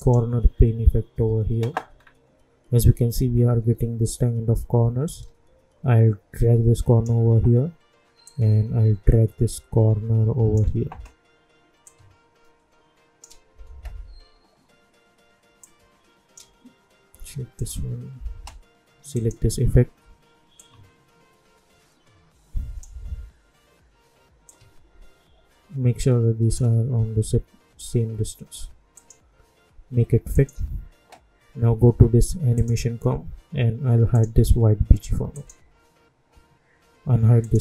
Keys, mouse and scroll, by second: 1.9-3.3 scroll down 1, 5.0-8.2 drag, 8.2-15.6 drag, 15.6-24.4 drag, 24.4-28.9 drag, 32.5 click.